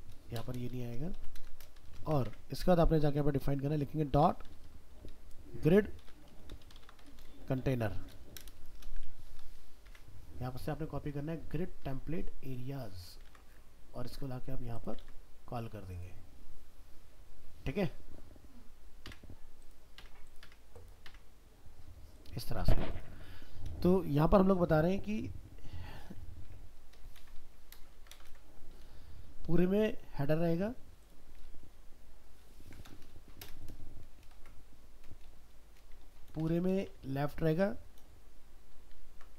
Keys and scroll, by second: 13.3 ctrl+c, 15.0 ctrl+v, 27.2 ctrl+c, 27.9 ctrl+v, 31.6 ctrl+shift+Left, 36.3 ctrl+c, 38.0 ctrl+v.